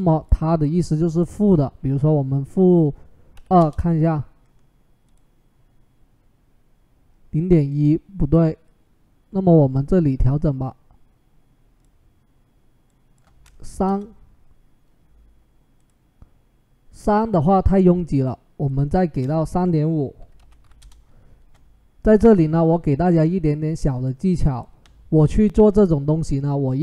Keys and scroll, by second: 3.2 typing, 3.4 Return, 13.5 typing, 13.6 Return, 19.9-20.9 typing.